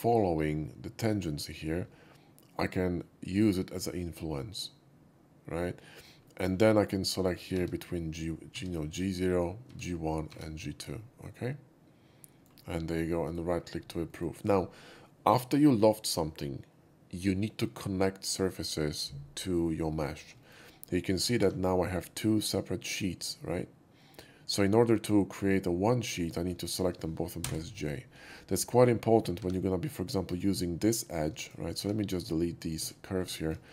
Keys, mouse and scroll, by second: 3.2 shift+click, 6.2 shift+middle click, 7.5 Tab, 10.9-12.4 middle drag, 13.2 right click, 14.0 middle click, 19.8 middle click, 20.4 shift+middle click, 21.3 4, 21.9 click, 22.4 click, 26.2 click, 26.6 shift+click, 27.3 j, 29.3 2, 30.3 click, 31.4 shift+click, 31.7 x, 32.5 click, 33.1 middle click, 33.3 shift+middle click, 33.3 shift+x.